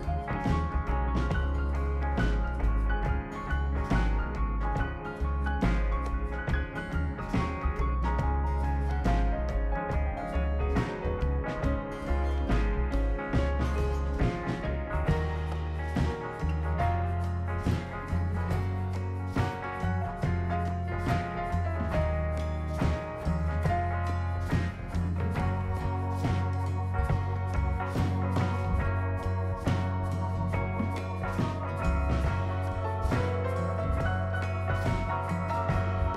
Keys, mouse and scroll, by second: 1.0 click, 2.2-3.3 typing, 3.4 Return, 5.2 click, 6.4 click, 7.8 2, 8.4 0, 9.0 Return, 11.6 scroll up 1, 12.6-13.1 scroll up 2, 14.3 scroll up 1, 14.9 scroll up 1, 15.3 click, 16.0 click, 16.3 scroll up 2, 19.5 click, 20.9 0, 21.5 ,, 22.0 1, 22.9 Return, 23.7-25.5 scroll down 12, 25.7-26.3 right drag, 28.7 click, 30.0-30.6 right drag, 32.8 click, 33.9 right click.